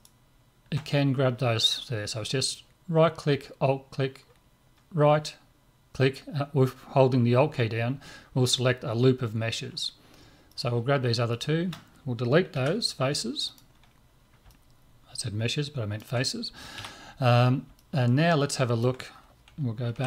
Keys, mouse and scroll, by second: 10.5 right click, 12.5 Delete, 14.1-16.4 middle drag, 16.8 z, 17.4-19.7 middle drag, 19.9 KP_Divide.